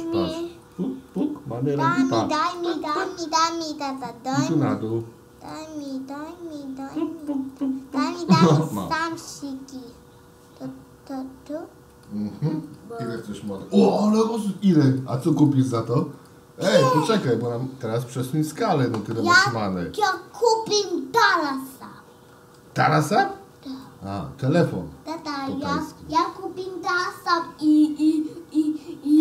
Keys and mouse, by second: 0.7 click, 2.9 click, 4.0-5.9 drag, 7.0 click, 7.2 click, 7.5 click, 7.9 click, 12.1 click, 12.8 click, 13.0 click, 13.4 click, 13.6 click, 13.9 click, 14.1 click, 14.4 click, 14.6 click, 14.9 click, 15.1 click, 15.4 click, 15.6 click, 15.9 click, 16.2 click, 16.7 click, 17.0 click, 20.0-22.6 shift+middle drag, 23.9-25.2 shift+middle drag.